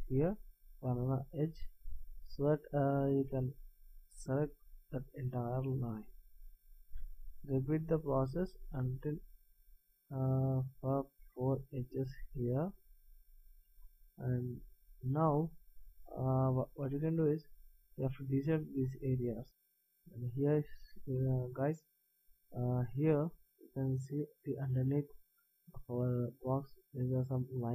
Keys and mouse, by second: 0.2 middle click, 2.3-4.6 middle drag, 4.6-6.2 right drag, 6.2 middle click, 8.8-10.5 middle drag, 11.5-13.4 middle drag, 14.0 middle click, 16.8 middle click, 20.8-27.7 middle drag.